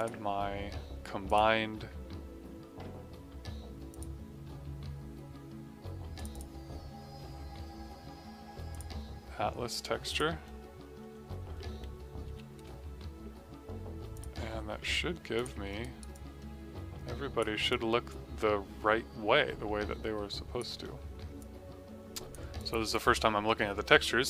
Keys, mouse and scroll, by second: 3.8 click, 8.6 click, 12.2 6, 14.1 click, 15.7 right click, 17.6 click, 20.7 middle click, 21.3 click, 22.5 alt+click.